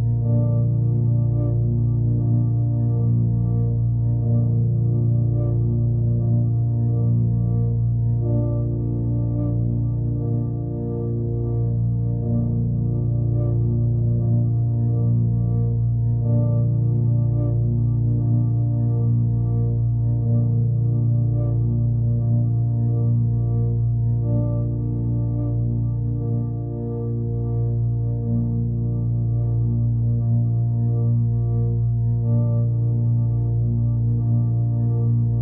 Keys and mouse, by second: 1.6 click, 2.5 click, 3.4-4.6 alt+drag, 4.6-5.6 alt+middle drag, 5.8-6.2 alt+middle drag, 7.1 click, 9.1 shift+click, 9.8 shift+click, 10.4 shift+click, 11.7 s, 12.7 g, 15.2 click, 15.7-16.6 alt+middle drag, 16.9-17.8 alt+middle drag, 18.3 click, 20.0 ctrl+a, 20.4-21.3 right drag, 21.7 alt+middle drag, 23.3 click, 24.2 click, 27.4-28.5 drag, 29.6-32.1 drag, 34.0-35.4 drag.